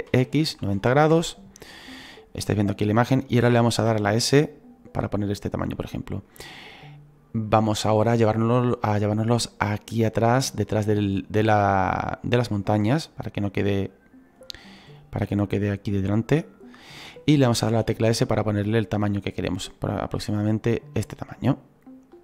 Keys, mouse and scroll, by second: 2.4 scroll up 6, 12.4-13.7 drag, 13.7-22.2 middle drag.